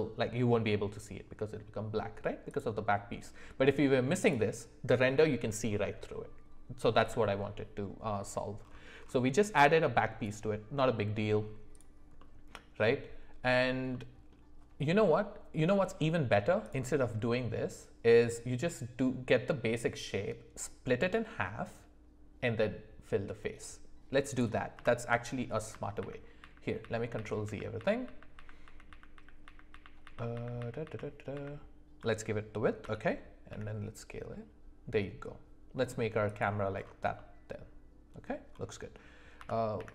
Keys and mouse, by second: 10.9-11.3 middle drag, 12.1 middle click, 13.9 middle click, 16.6 click, 24.3 click, 24.7 Delete, 26.0 ctrl+z, 26.4 ctrl+z, 26.8 ctrl+z, 27.1 ctrl+z, 27.4 ctrl+z, 27.7 ctrl+z, 28.0 ctrl+z, 28.3 ctrl+z, 28.6 ctrl+z, 28.9 ctrl+z, 29.1 ctrl+z, 29.4 ctrl+z, 29.7 ctrl+z, 30.0 ctrl+z, 30.3 ctrl+z, 30.6 ctrl+z, 30.8 ctrl+z, 31.3 ctrl+z, 32.8 s, 37.1-38.2 middle drag, 39.4 s.